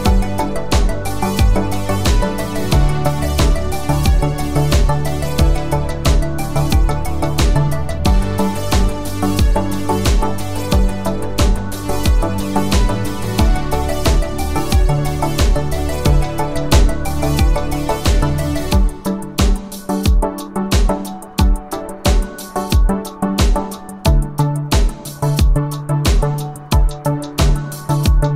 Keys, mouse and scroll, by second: 0.1 click, 4.6 n, 8.5 click.